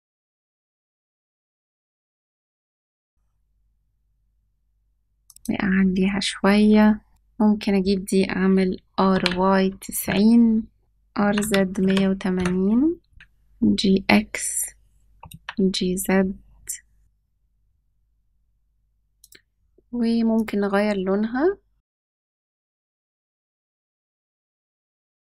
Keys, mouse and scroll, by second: 2.5 g, 5.3-7.1 drag, 7.1 scroll down 2, 7.1 n, 8.8 r, 11.0 r, 13.1 g, 19.1 click, 24.6 g.